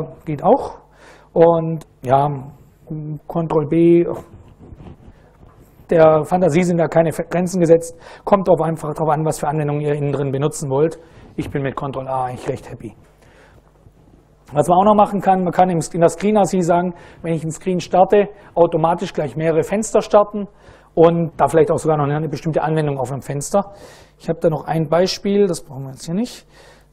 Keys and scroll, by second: 23.8 super+Right, 25.0-26.9 typing.